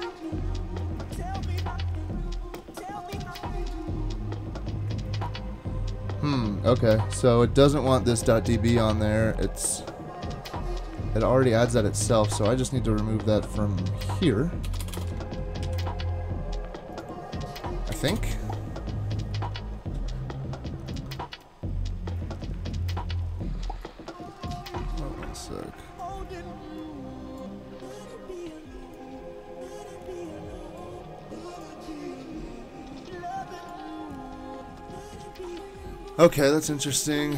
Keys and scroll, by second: 11.7 super+Tab, 12.3 super+Tab, 14.6 BackSpace, 14.8 BackSpace, 14.9 BackSpace, 15.6 super+s, 18.1 Return.